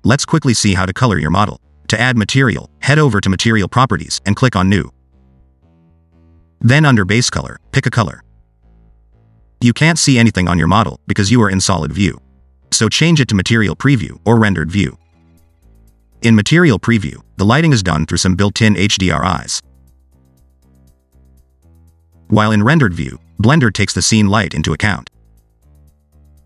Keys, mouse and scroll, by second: 0.1 click, 1.6-2.8 scroll down 3, 2.8 click, 5.3 click, 6.3-7.3 scroll down 3, 7.3 click, 15.3 click, 17.8 click, 22.7 click, 23.5 scroll down 4, 24.3 click.